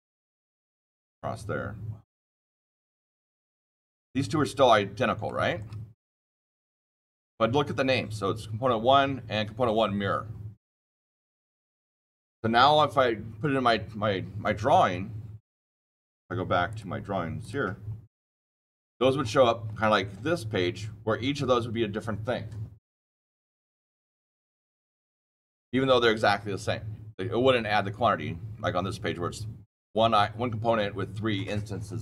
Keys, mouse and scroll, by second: 0.4 click, 2.0 click, 2.5 click, 3.1 click, 3.9 shift+click, 4.3 shift+middle click, 4.4 scroll, 5.2 shift+middle click, 5.9 shift+middle click, 16.6 click, 17.3 click, 17.8 scroll down 2, 18.5-19.1 scroll down 6, 19.1-19.6 scroll up 6, 19.6 scroll down 2, 20.4 scroll down 1, 20.5 click, 20.6 click, 28.1 click, 28.2-31.7 scroll down 5.